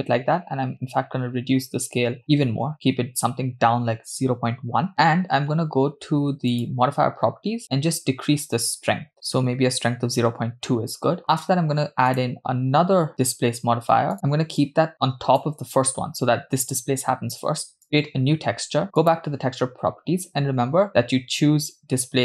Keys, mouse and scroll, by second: 4.9-5.5 scroll up 2, 6.5 click, 7.8-9.4 drag, 12.1-14.1 drag, 14.7 click, 17.8 click, 19.0 click, 20.9-22.2 drag.